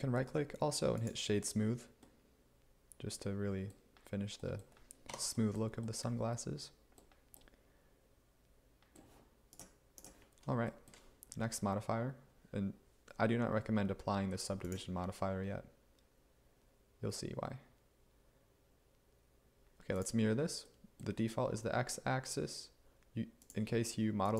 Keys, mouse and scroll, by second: 5.2 Tab.